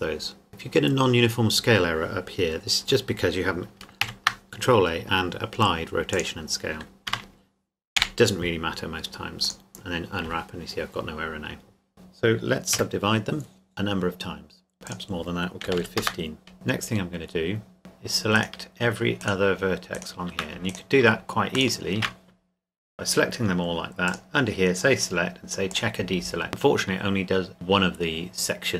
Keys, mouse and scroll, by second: 2.8 Tab, 4.0 ctrl+a, 6.1 click, 7.1 Tab, 7.9 u, 9.4 click, 11.9 a, 12.7 w, 13.7 click, 14.9 click, 15.7 KP_1, 15.8 KP_5, 16.0 KP_Enter, 17.8 shift+right click, 24.1 click.